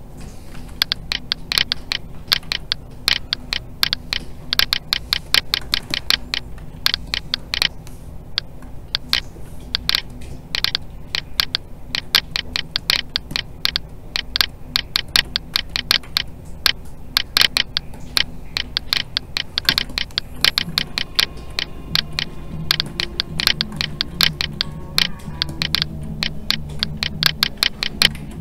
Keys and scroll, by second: 0.5 alt+a, 6.6 alt+a, 28.1 alt+a.